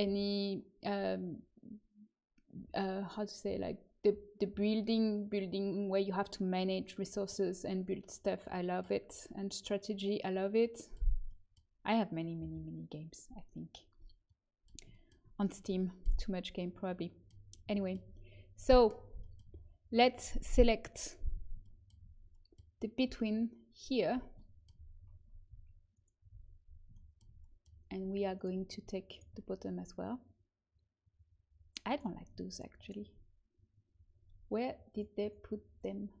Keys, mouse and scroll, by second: 14.6-18.5 middle drag, 20.9-23.4 drag, 25.9 click, 26.3 right click, 26.4 click, 31.8-34.8 right drag, 34.8-36.2 drag.